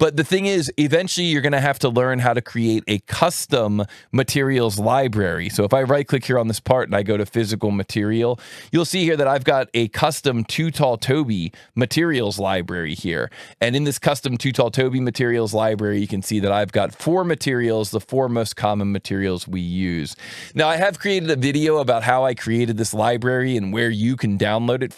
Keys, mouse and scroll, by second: 1.4 click, 3.2 right click, 6.8 click, 9.1 click, 12.0 click, 14.5 click, 15.5 alt+1, 17.0 click, 18.0 click, 18.7 click, 20.1 click.